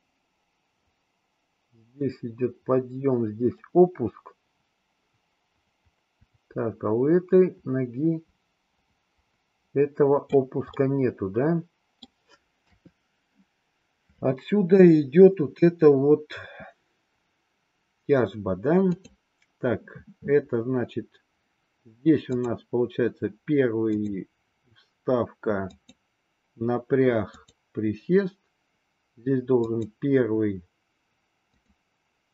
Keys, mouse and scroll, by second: 10.8-12.0 middle drag, 12.6 KP_3, 19.0 click, 22.4 click, 23.9 click, 25.6 click, 27.3 click, 29.5 click, 31.5 click.